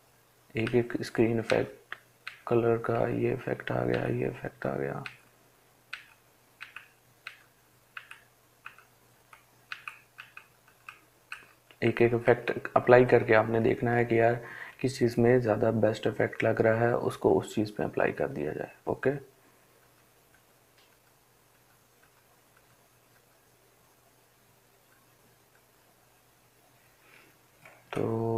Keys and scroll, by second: 0.8 Down, 2.2 Down, 3.2 Down, 4.3 Down, 5.2 Down, 6.5 Down, 7.2 Down, 7.9 Down, 8.4 Down, 9.0 Down, 10.0 Down, 10.6 Down, 11.1 Down, 12.1 Down, 12.5 Down, 13.6 Up, 14.8 Up.